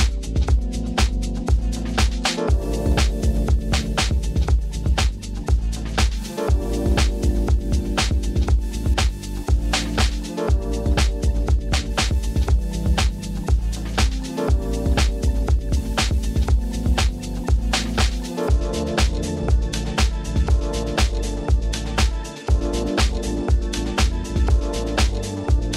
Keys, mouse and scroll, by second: 0.0 click, 0.0 shift+s, 1.1-2.2 typing, 1.8 middle drag, 1.9 click, 1.9 right click, 3.0-3.4 shift+middle drag, 3.5 Tab, 4.7 click, 5.5 shift+click, 6.5 shift+click, 6.8 shift+click, 7.1 shift+click, 7.4 shift+click, 9.6 shift+click, 10.3 middle click, 10.5 shift+middle click, 10.6 shift+click, 11.0 middle click, 11.2 shift+click, 11.5 middle click, 12.7 click, 14.0 drag, 14.7 click, 15.5 ctrl+z, 16.2 click, 16.6-18.0 drag, 18.2 middle click, 18.4 shift+middle click, 18.8 middle click, 19.0 shift+middle click, 19.7 click, 20.1 g, 20.7 click, 21.5 shift+click, 21.7 g, 21.9 z, 22.3 click, 22.7 click, 23.2 shift+click, 23.5 g, 23.6 z, 24.1 click, 24.7-25.7 typing, 25.2 click.